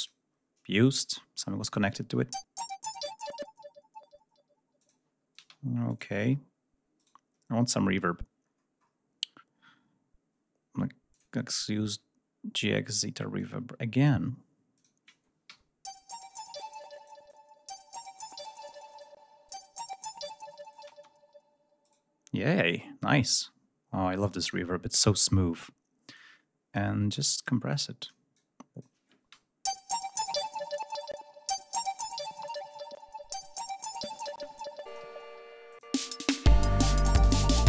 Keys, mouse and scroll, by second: 1.7 click, 1.9 space, 5.3 space, 8.4-8.9 scroll down 2, 11.1 click, 13.3 click, 14.7 click, 15.4 l, 16.4 click, 17.2 click, 18.2 click, 19.4 click, 20.6 click, 21.3 space, 21.8 right click, 24.3 click, 26.1 click, 27.1 click, 27.6 click, 29.3 l, 34.8 space, 35.9 space.